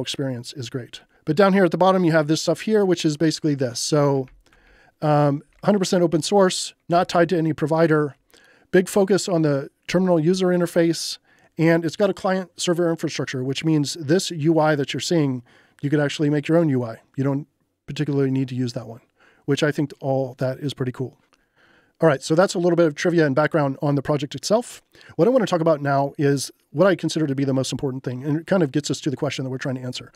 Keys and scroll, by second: 3.8-5.1 typing, 6.9 j, 9.9 j.